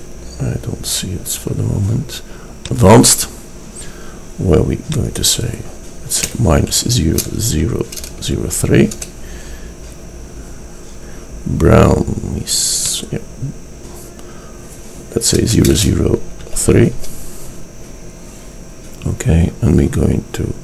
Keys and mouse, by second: 5.1-7.0 drag, 12.9-15.0 drag.